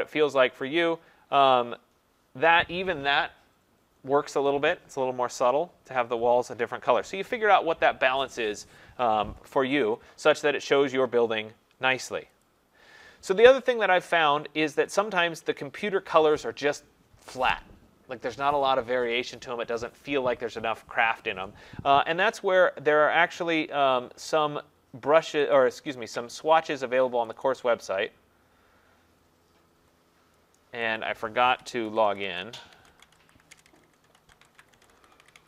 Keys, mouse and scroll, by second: 0.3 click, 0.4 click, 1.5 click, 6.4 click, 12.4 click, 25.6 click, 27.3 click, 27.6 click, 31.0 click, 31.6-35.4 typing, 33.1-35.4 drag.